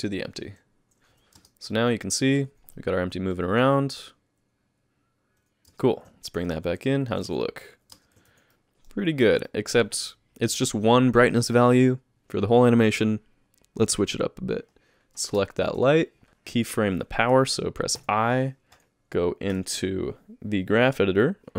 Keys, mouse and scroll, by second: 20.5 click.